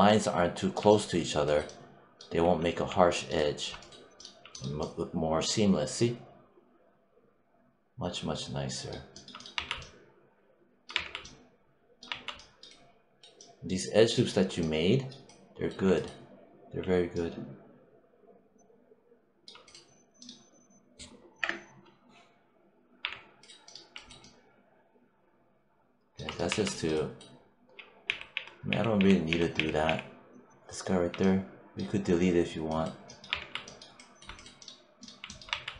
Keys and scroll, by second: 2.4 3, 9.4 1, 10.8 3, 11.9 1, 21.3 BackSpace, 22.9 3, 26.3 1, 27.9 z, 33.2 3, 35.4 1.